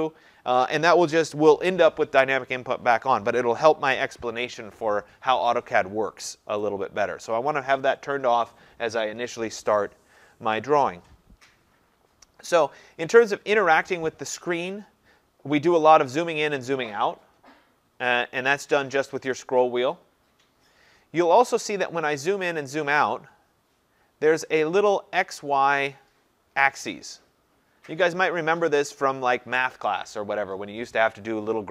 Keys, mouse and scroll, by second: 15.4-15.7 scroll down 3, 16.3-17.3 scroll, 17.3-17.7 scroll, 17.8-18.4 scroll, 18.9-19.5 scroll, 19.9-20.5 scroll, 20.5-23.1 scroll, 23.1-23.9 scroll up 5, 23.9-24.3 scroll up 2.